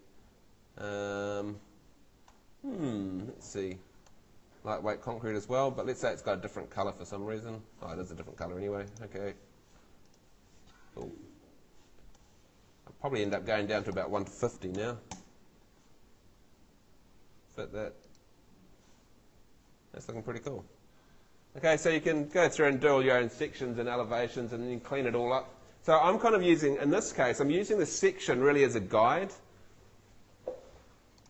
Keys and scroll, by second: 14.3-15.3 typing, 21.7 ↺.